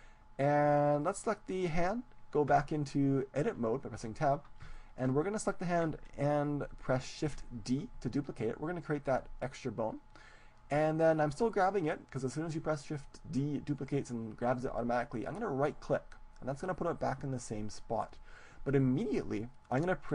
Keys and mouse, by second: 1.1-2.7 right drag, 2.5 Tab, 4.7-6.5 middle drag, 7.5 shift+d, 15.7-17.5 right drag.